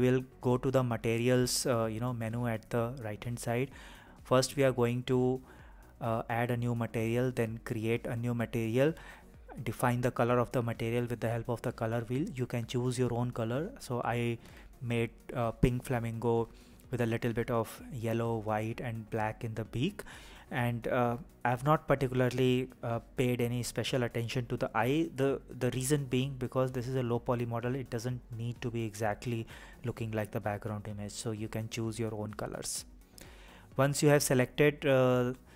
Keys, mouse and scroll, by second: 1.9 click, 3.7 click, 5.6 click, 16.8 click, 17.5 a, 19.2 click, 22.4 click, 24.7 click, 29.7 click, 30.4 click, 31.8 click, 32.4 click, 33.2 click.